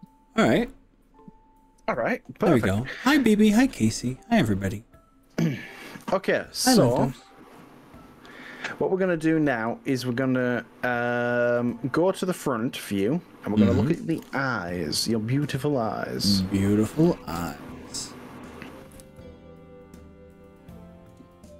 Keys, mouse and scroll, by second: 14.2 KP_1, 16.4-17.6 middle drag, 17.9 shift+middle click, 18.9 KP_1, 20.3 shift+middle click.